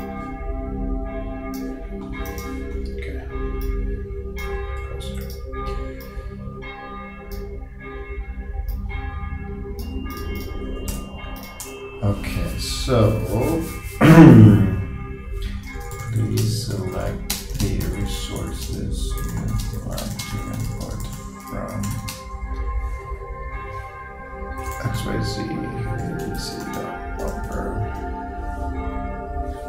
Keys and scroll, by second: 15.8 shift+p, 24.6 shift+x, 26.7 shift+., 27.2 shift+b.